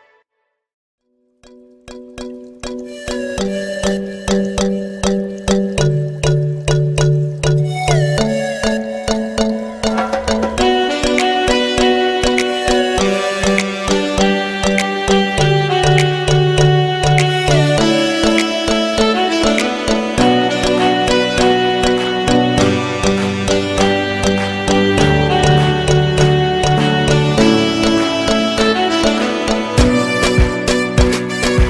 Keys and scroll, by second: 17.1 Delete.